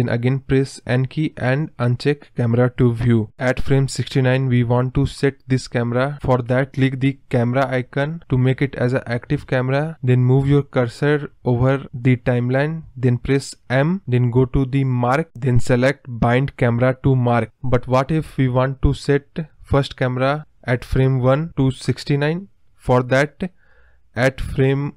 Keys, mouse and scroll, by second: 0.1 n, 13.6 m, 16.0-19.1 drag, 20.0-23.0 drag, 24.3 Right.